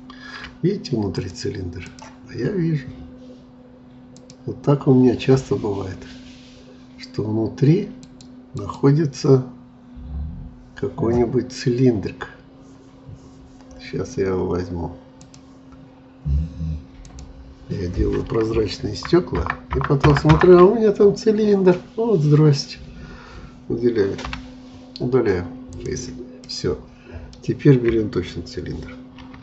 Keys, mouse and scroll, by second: 1.1-2.3 drag, 2.3-4.1 scroll up 2, 4.1-7.2 drag, 8.0-11.5 drag, 11.5 scroll up 1, 12.2 scroll down 1, 15.2-18.7 drag, 18.7 ctrl+KP_Add, 19.4 ctrl+KP_Add, 21.6 scroll down 2, 24.2 Delete, 26.4-29.2 middle drag.